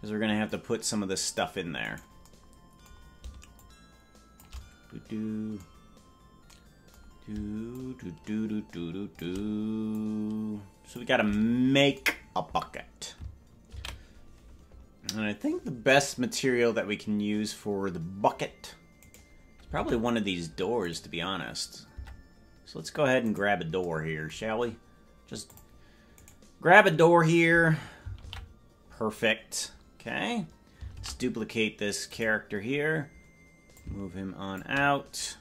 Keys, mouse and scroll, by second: 0.4 click, 1.9 right click, 3.5 shift+click, 7.7-9.2 shift+drag, 9.9-11.0 drag, 17.0 ctrl+s, 19.1 right click, 19.8 ctrl+Tab, 20.9 right click, 21.9 Tab, 23.2 right click, 25.5 click, 26.1-28.1 right drag, 28.1 ctrl+l, 30.9 shift+d, 33.7 click.